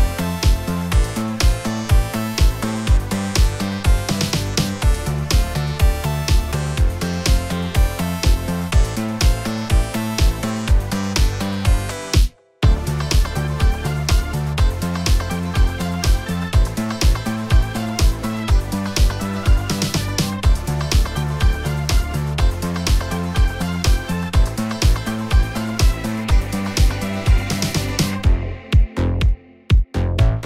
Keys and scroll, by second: 1.6 F11, 6.1 ctrl+z, 9.7 ctrl+shift+z, 10.4 typing, 12.3 a, 17.4 shift+space, 21.4 F11, 22.4 a, 27.4 shift+space.